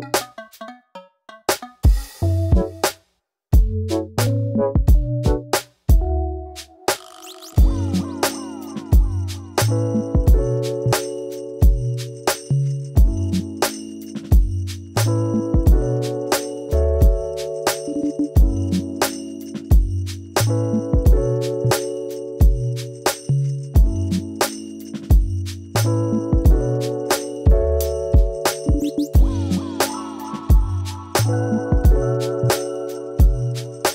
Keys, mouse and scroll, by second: 0.4 middle click, 0.7 click, 1.1 click, 1.8 KP_1, 2.2 scroll up 2, 2.3 shift+middle click, 2.9 g, 4.6 g, 4.8 middle click, 5.0 scroll down 2, 5.1-5.7 middle drag, 5.7 Tab, 5.9 scroll down 3, 6.0-7.1 middle drag, 7.1 scroll down 3, 7.3-8.8 middle drag, 9.2 KP_1, 10.0 click, 10.1 Tab, 10.3-10.8 scroll up 2, 11.1 scroll up 2, 12.3-12.7 scroll up 2, 12.7 alt+click, 13.1 shift+middle click, 13.4 s, 14.2 alt+click, 14.5 s, 15.1 alt+click, 15.3 s, 16.3-16.9 scroll up 3, 17.1 alt+shift+click, 17.4 alt+shift+click, 19.1 alt+click, 19.6 click, 21.2 click, 22.6 g, 23.6 g, 23.7 click, 23.8 g, 24.6 click, 24.7 g, 25.6-26.7 middle drag, 26.7 click, 27.2 shift+middle click, 27.9 click, 28.0-30.7 typing, 28.6 click, 29.4 middle click, 30.0 middle click, 30.7 click, 31.6 click, 31.7 g, 32.2 scroll down 3, 32.3 middle click, 32.5 Tab, 32.8 Tab, 32.9 scroll up 2, 33.0 middle click, 33.3 click.